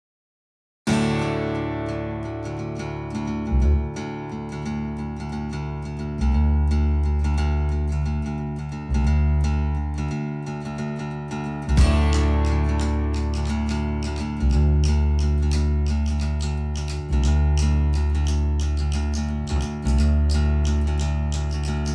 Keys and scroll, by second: 3.2 space, 16.2 d.